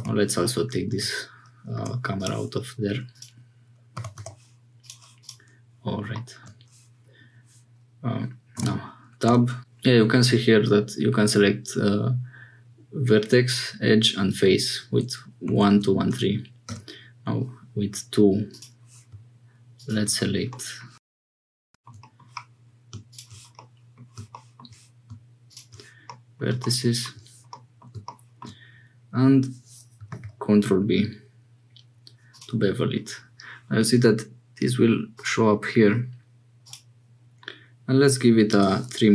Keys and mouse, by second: 4.0 g, 8.6 Tab, 9.2 2, 15.5 1, 15.6 2, 16.6 2, 19.8 shift+click, 20.5 click, 22.0 click, 23.5 click, 26.0 click, 27.5 click, 30.1 ctrl+b, 35.1 click, 36.8-39.1 drag.